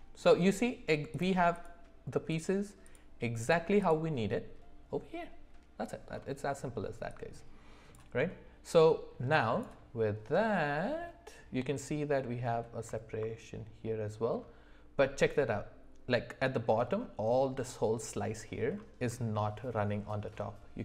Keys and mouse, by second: 1.1 click, 2.3 click, 2.8 click, 3.8 click.